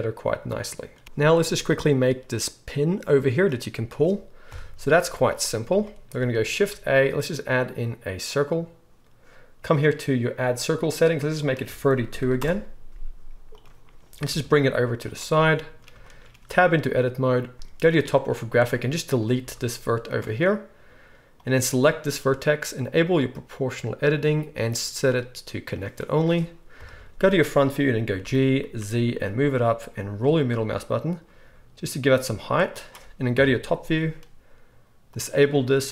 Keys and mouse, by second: 1.0 KP_1, 1.0 z, 3.3-11.8 drag, 4.5 KP_1, 4.8 z, 6.5 shift+a, 11.3 middle click, 11.3 right click, 12.3-15.1 drag, 12.3-15.1 middle drag, 12.3-15.7 right drag, 14.3 g, 15.7-18.6 shift+drag, 16.4 Tab, 17.5 KP_7, 18.6-21.4 middle drag, 19.4 x, 21.4-23.0 drag, 23.0 middle click, 23.1-24.1 drag, 24.1-32.8 middle drag, 26.8 KP_1, 28.2 g, 32.8-35.1 right drag, 33.4 KP_7, 35.1 middle click, 35.2-35.9 right drag.